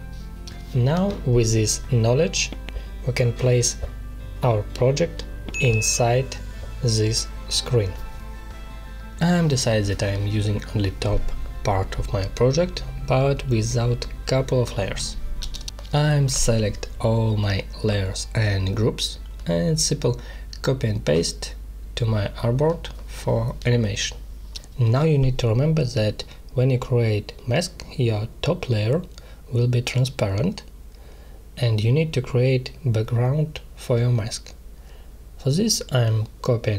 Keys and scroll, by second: 6.8 space, 9.2 space, 13.1 space, 20.5 ctrl+z, 20.9 space, 24.0 space, 26.0 space.